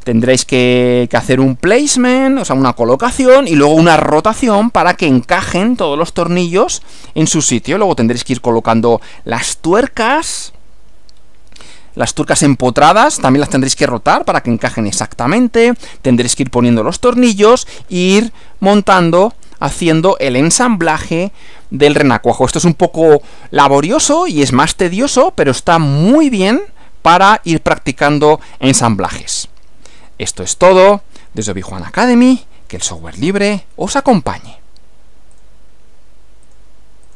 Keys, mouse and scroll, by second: 10.4 scroll up 2, 11.2 scroll down 2, 18.4 Left, 35.4 click, 36.4 click, 37.0 click.